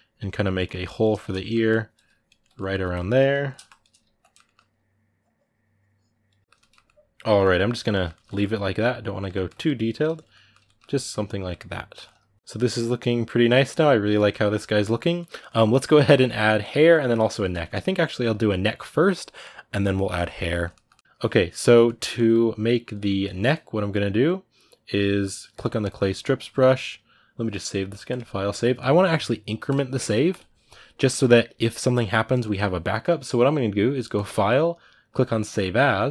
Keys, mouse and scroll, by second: 0.3 ctrl+middle click, 0.4 ctrl+right click, 0.4 ctrl+click, 0.8 shift+middle click, 1.4 ctrl+click, 2.2 ctrl+middle click, 2.9-4.0 ctrl+drag, 4.0 ctrl+middle click, 4.3-6.2 ctrl+drag, 6.2 ctrl+middle click, 6.4 shift+click, 6.6-25.4 ctrl+middle drag, 25.4 click, 26.2-36.1 ctrl+middle drag.